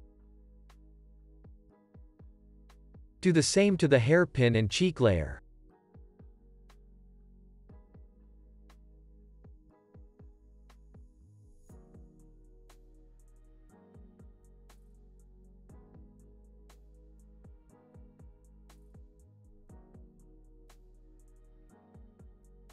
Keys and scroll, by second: 4.0 x, 7.2 p, 13.8 c, 15.1 space, 21.8 space, 22.5 x.